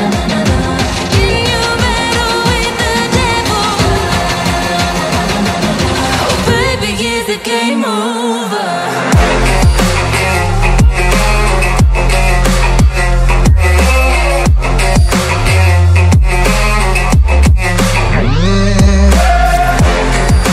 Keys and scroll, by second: 1.0 KP_0, 2.1-2.5 ctrl+z, 2.8 ctrl+z, 3.0 ctrl+z, 3.3 ctrl+z, 3.4 ctrl+z, 5.8 ctrl+space, 6.0 KP_Decimal, 7.8 KP_Decimal, 13.4 KP_Decimal, 13.9 KP_0, 16.2 shift+d, 17.4-17.9 ctrl+e, 18.1 ctrl+e, 19.0 e, 19.7 KP_7.